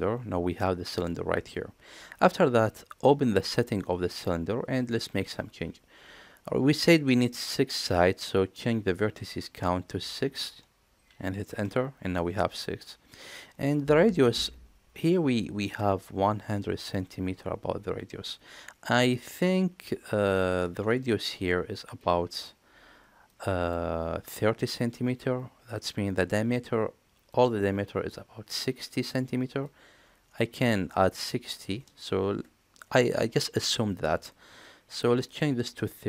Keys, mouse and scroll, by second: 9.6-12.7 drag, 35.3-36.0 drag.